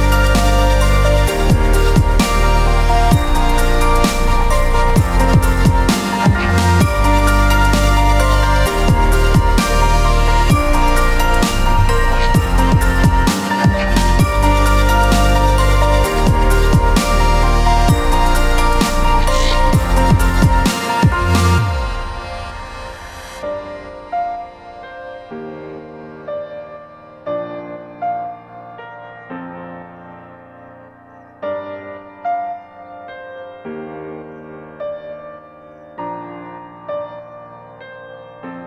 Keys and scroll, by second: 11.0 s, 24.0 ctrl+KP_0, 24.4 ctrl+space, 27.1 j.